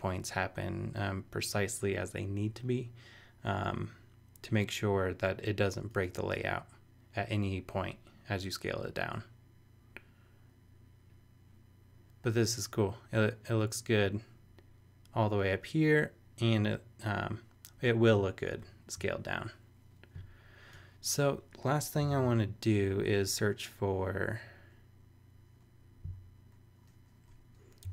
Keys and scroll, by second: 22.1 super+t, 27.6-27.9 typing.